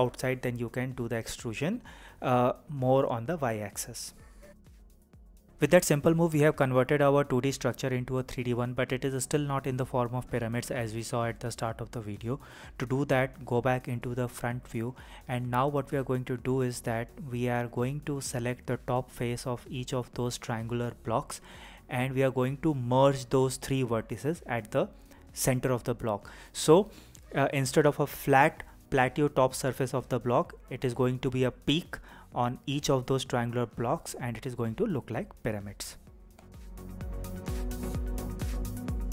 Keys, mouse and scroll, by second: 5.3 click, 7.6 KP_1, 9.7-12.7 middle drag, 12.7 KP_1, 17.1 click, 17.8 click, 20.2 alt+m, 24.3 m, 27.5-32.4 middle drag, 32.4-39.1 typing, 32.9 click, 33.3 click, 33.9 click, 34.6 click, 34.8 click, 34.9 click, 35.7 drag, 36.7 click, 36.9 click, 37.1 click, 37.5 click, 37.9 click, 38.3 click, 38.4 click, 39.0 click.